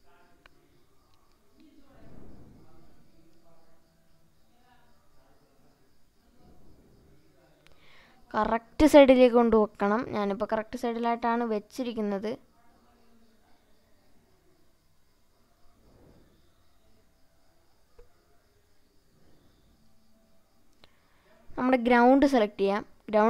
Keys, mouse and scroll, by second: 18.2 click.